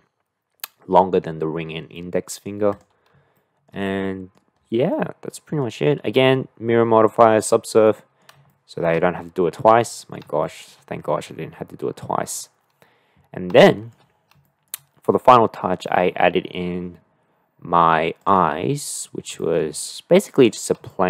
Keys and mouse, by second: 1.9-2.5 middle drag, 2.7 click, 3.3-3.7 shift+middle drag, 3.9-4.4 middle drag, 5.0-5.6 middle drag, 7.9 middle click, 8.5 shift+middle click, 9.8-10.2 middle drag, 10.4 shift+middle drag, 13.6 shift+middle click, 14.5 shift+middle click, 18.7-19.0 middle drag, 19.4 shift+middle click, 20.4 click, 20.9-21.0 shift+middle drag.